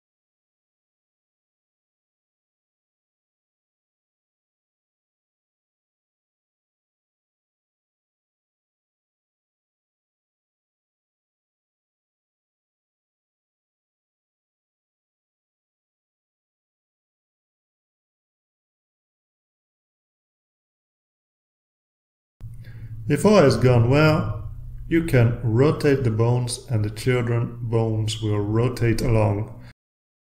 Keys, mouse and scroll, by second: 0.0-0.3 typing, 0.3 click, 0.5 scroll up 2, 0.6-0.9 scroll down 4, 0.9-1.3 scroll up 4, 1.1 click, 1.5 drag, 1.7 click, 2.0 click, 2.4 click, 2.6 scroll down 1, 3.1 click, 3.3 scroll up 1, 3.3-5.3 typing, 3.4 click, 4.3 click, 4.5 click, 5.1 click, 5.7 click, 6.0 click, 6.3 click, 6.3-11.8 typing, 6.4 click, 7.2 click, 7.3 scroll down 1, 7.6 click, 7.8 scroll down 2, 8.0 scroll up 2, 8.1 click, 8.9 click, 9.1 scroll up 1, 9.3 click, 10.4 scroll down 2, 10.5 click, 10.6 scroll up 2, 10.8 click, 11.7 click, 11.9-12.2 scroll up 4, 12.2-13.2 scroll down 2, 13.2 click, 13.4 scroll up 2, 13.6 scroll down 2, 13.8 scroll up 4, 14.1 click, 14.2 click, 14.4 click, 14.5 scroll up 2, 14.6 click, 14.9 click, 15.3 click, 15.7 click, 16.0 click, 16.3 click, 16.8 click, 17.0-17.3 scroll down 4, 17.4-17.8 scroll up 2, 18.0 click, 18.3 click, 18.4 scroll down 2, 18.5 click, 18.7 click, 18.9 scroll down 2, 19.1-22.3 typing, 19.1 click, 19.8 click, 20.0 click, 20.1 scroll down 1, 20.3 click, 21.1 click, 21.4 click, 22.2 click, 22.4 ctrl+r, 24.3-26.6 drag, 27.9 ctrl+z, 29.4 ctrl+z.